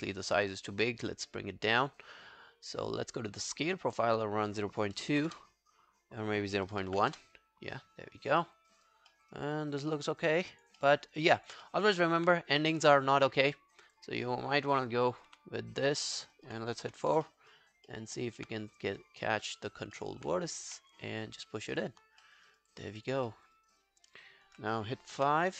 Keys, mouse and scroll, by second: 2.5-2.8 scroll up 3, 2.8 scroll down 3, 4.8-7.4 typing, 4.8 scroll, 8.4 alt+middle click, 8.7 alt+right click, 9.1 alt+middle click, 9.4 alt+right click, 9.6 alt+click, 9.9 alt+middle click, 10.1 alt+right click, 10.4 alt+click, 10.8 alt+middle click, 11.0 alt+right click, 11.3 alt+click, 11.7 alt+middle click, 11.9 alt+right click, 15.3 4, 16.1 alt+middle click, 16.4 alt+right click, 16.9 4, 17.3 alt+middle click, 17.5 alt+right click, 17.9 alt+middle click, 18.2 alt+right click, 18.9 right click, 19.9 right click, 20.0 alt+middle click, 22.0 scroll down 1, 22.2 alt+middle click, 22.5 alt+right click, 22.7 alt+click, 23.3 alt+middle click, 23.6 alt+right click, 23.8 alt+click, 25.2 5.